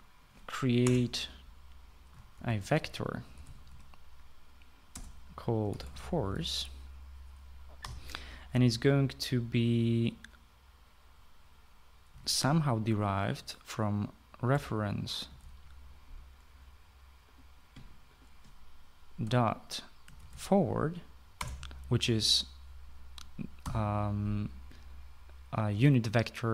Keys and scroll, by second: 1.4 Return, 2.7-8.4 typing, 12.5-13.2 typing, 14.9-16.5 typing, 19.6-21.4 typing, 22.0 Return, 24.2 ;.